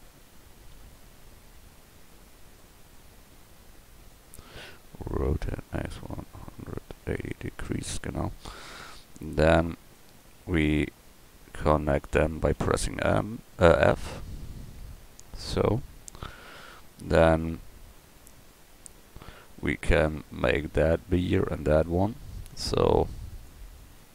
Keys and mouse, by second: 0.3 ctrl+z, 0.7 ctrl+z, 3.9 click, 5.3 r, 12.5 f, 15.4 f, 16.6 a.